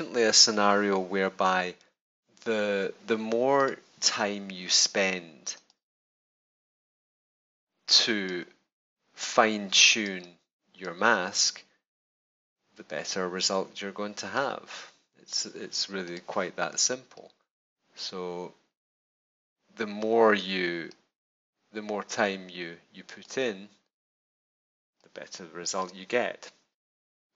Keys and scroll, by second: 24.8 space.